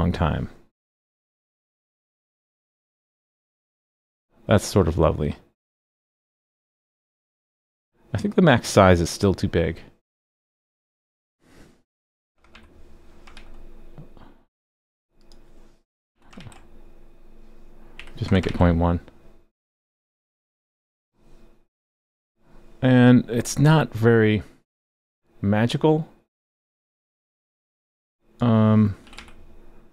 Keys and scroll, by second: 13.3 super+s, 16.4 super+s, 18.5 super+s.